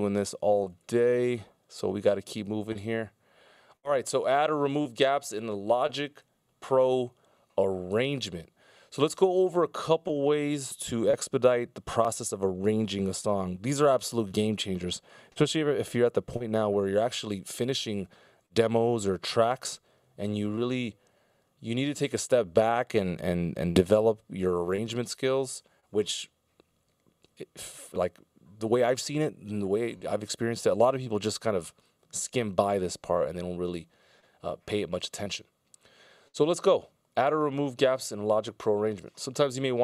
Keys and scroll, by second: 27.1 F16.